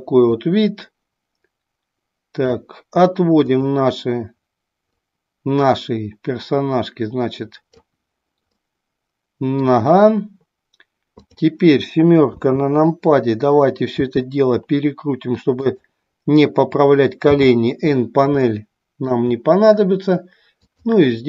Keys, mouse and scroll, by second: 0.5-2.4 drag, 3.4 click, 4.9-7.7 drag, 8.6-9.7 middle drag, 11.2 click, 14.1 r, 15.7 click, 17.3 n, 18.4-19.2 middle drag, 20.5-21.2 drag.